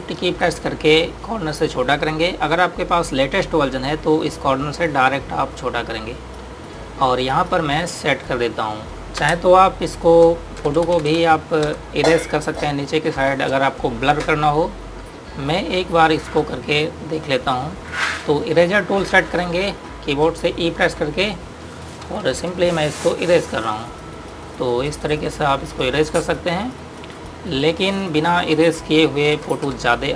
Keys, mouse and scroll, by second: 0.8 ctrl+z, 5.6 click, 9.9 Return, 11.1-13.6 typing, 12.8 click, 13.6 click, 15.3 click, 21.6-23.6 typing, 23.4 click.